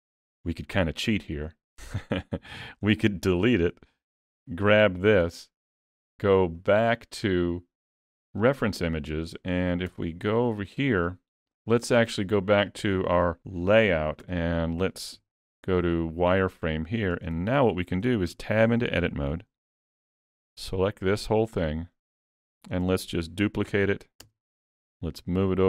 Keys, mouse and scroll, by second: 0.2 x, 4.3 l, 6.5 click, 8.5 click, 9.9 KP_3.